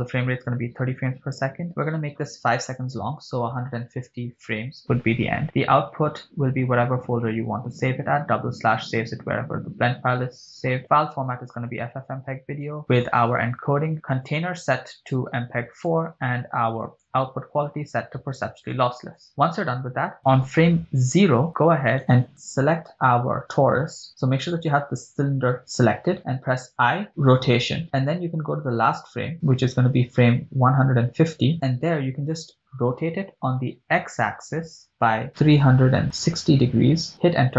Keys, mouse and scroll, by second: 2.3-4.6 drag, 5.7-8.2 drag, 7.5 /, 9.2-10.7 scroll down 3, 10.8-12.4 drag, 13.0 scroll down 1, 13.6 click, 13.9 scroll down 2, 14.6-16.4 drag, 17.4-19.3 drag, 21.2 Left, 22.2 right click, 25.2 click, 31.6 click, 33.7 r, 34.9 x, 36.2 3, 37.2 Return, 37.2 0.